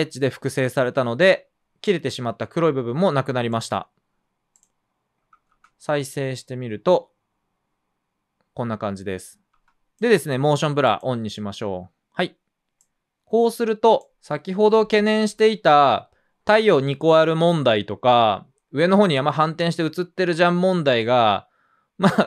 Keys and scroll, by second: 5.5 space, 9.5 space, 13.1 space.